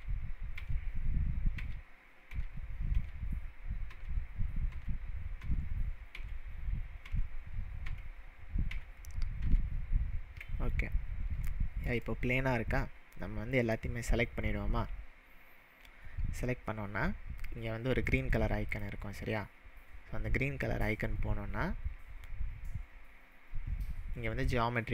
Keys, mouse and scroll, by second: 0.2 ctrl+z, 1.0 ctrl+z, 1.3 ctrl+z, 1.6 ctrl+z, 2.4 ctrl+z, 4.1 ctrl+z, 4.9 ctrl+z, 5.8 ctrl+z, 6.6 ctrl+z, 7.4 ctrl+z, 8.2 ctrl+z, 9.1 ctrl+z, 9.8 ctrl+z, 10.6-11.3 scroll up 3, 11.5-13.8 shift+middle drag, 18.7 click.